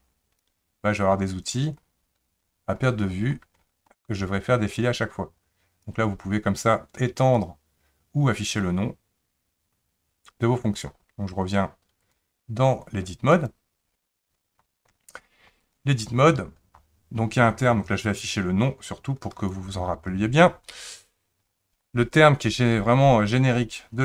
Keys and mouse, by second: 4.7-5.9 drag, 7.3-10.9 drag, 12.1-13.5 drag, 15.6 click, 18.0-19.5 drag.